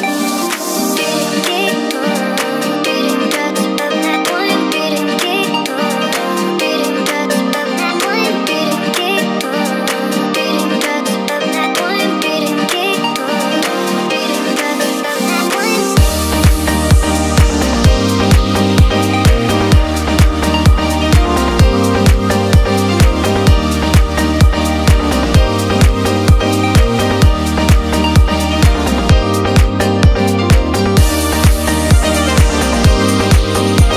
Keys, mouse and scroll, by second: 0.1-1.6 drag, 2.8-4.6 middle drag, 4.6 click, 5.0 shift+drag, 5.4 shift+click, 7.0 i, 7.9 click, 8.6-9.7 drag, 11.1 i, 12.5 click, 13.4 click, 14.4-15.5 middle drag, 16.1 click, 17.6-18.7 drag, 18.9-19.9 scroll down 2, 19.3-20.4 middle drag, 20.6 Tab, 20.8-21.2 scroll up 2, 21.2-22.7 middle drag, 23.1-27.5 middle drag, 29.5 KP_1, 30.5-32.3 drag, 33.0-33.9 drag.